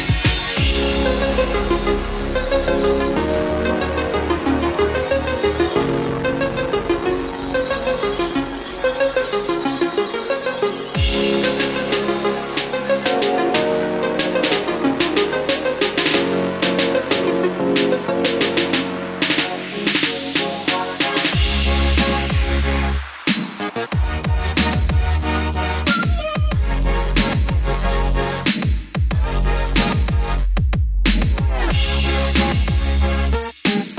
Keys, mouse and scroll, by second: 12.2-12.7 scroll down 1, 14.0-20.5 drag, 21.5 space, 21.9 click, 26.6-28.6 drag, 33.2-33.9 scroll down 1.